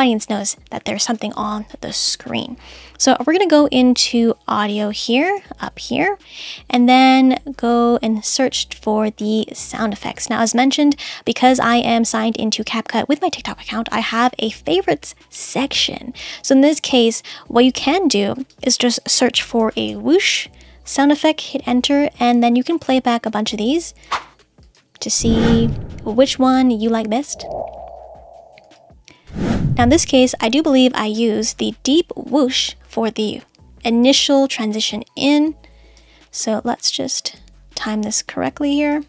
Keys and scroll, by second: 21.4 Return.